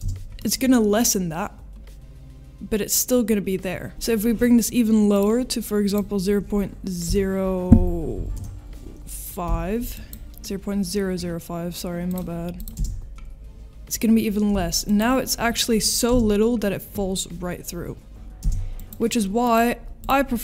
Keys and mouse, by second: 0.0 space, 0.5 middle click, 3.9 space, 5.1-10.2 drag, 12.1 drag, 12.5 click, 12.7 space, 14.8-15.6 drag, 15.8 middle drag, 18.8 space, 19.5 middle click, 20.0 click.